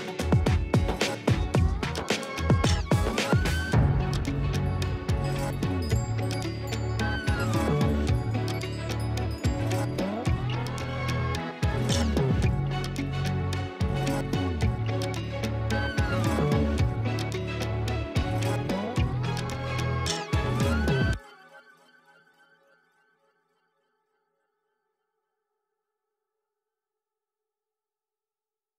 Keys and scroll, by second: 1.9 ], 3.7 [, 4.8 ], 25.4 space, 27.6 ].